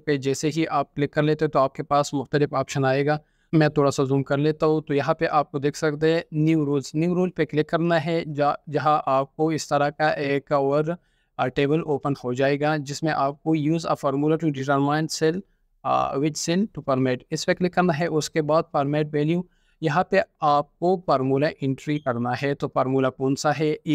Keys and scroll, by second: 0.0 ctrl+4, 0.2 ctrl+4, 4.5 ctrl+4.